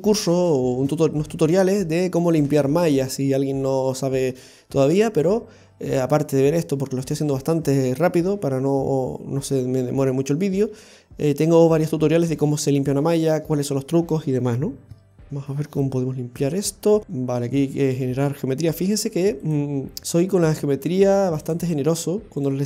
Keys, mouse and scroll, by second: 5.2-5.9 scroll down 1, 8.8-9.8 scroll down 1, 9.8-11.6 scroll up 1, 16.7 scroll up 1, 17.0 shift+middle click, 17.1 middle click, 18.9 ctrl+r, 20.0 middle click, 20.0 scroll up 1, 21.5 click, 22.4 right click.